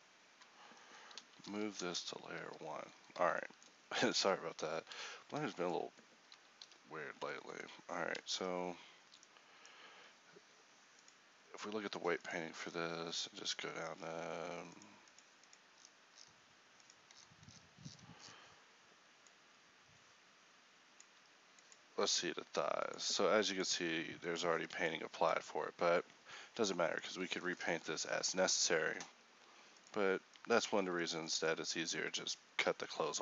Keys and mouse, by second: 1.2 m, 2.5 1, 4.7 a, 5.1 z, 6.7 h, 8.3 ctrl+t, 31.7 a, 33.1 h.